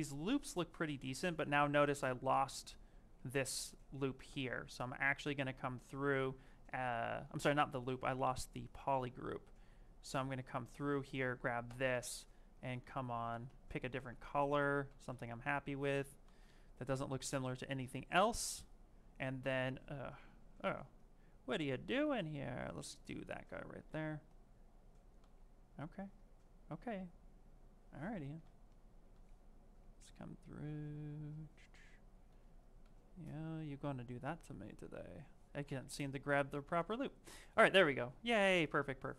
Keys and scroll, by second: 2.3 ctrl+space, 7.2 z, 9.8 ctrl+space, 12.6 ctrl+z, 13.8 ctrl+z, 14.7 ctrl+z, 20.6 z, 32.7 ctrl+z, 34.3 ctrl+space, 36.8 ctrl+w.